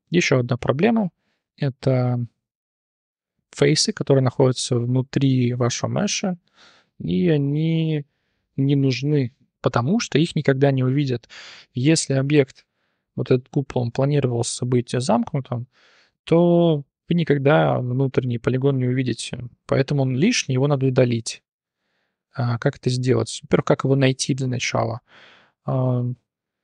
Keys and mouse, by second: 0.2 shift+middle drag, 0.6 middle drag, 0.9 t, 1.2 middle click, 1.5 shift+drag, 1.9 click, 6.2 click, 9.6 click, 10.1-10.4 drag, 11.0-11.6 drag, 11.8 click, 12.1-12.5 drag, 12.8-13.2 drag, 13.4-15.9 drag, 16.1-17.3 drag, 18.7-19.0 drag, 19.6 click, 19.8 middle click, 20.3 click, 20.6 middle click, 21.3-21.7 middle drag, 22.8 middle click, 23.3 click, 23.6 middle drag, 24.3 click, 24.6 click.